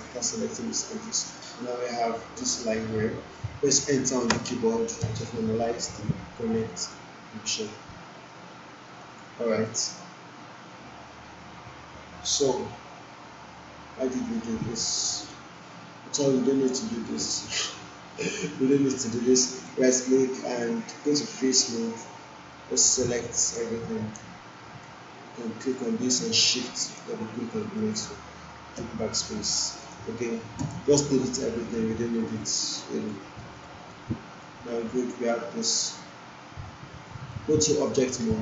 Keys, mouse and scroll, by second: 4.3 Return, 6.7 Return, 6.9-7.9 alt+click, 7.9-8.5 alt+middle click, 9.0-9.9 alt+drag, 15.2-18.3 alt+drag, 19.6-20.8 right click, 23.1 click, 25.6 click, 26.7 shift+click, 28.8 BackSpace, 29.6 click, 30.6 BackSpace, 32.6-33.2 alt+click, 33.4 alt+click, 34.8-35.8 alt+drag, 37.3-38.4 right click.